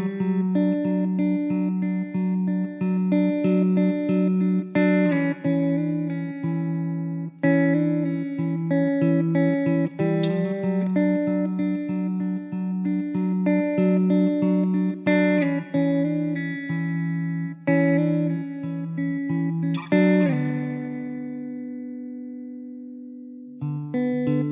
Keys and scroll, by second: 2.7 Tab, 4.8 ctrl+r, 17.7 ctrl+b, 23.6 e.